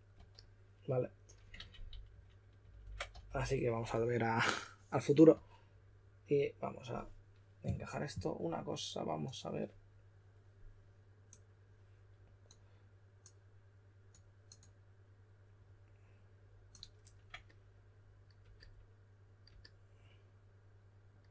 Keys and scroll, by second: 0.0-0.1 typing, 1.7 super+z, 2.1 super+z, 3.1 typing, 5.3 typing.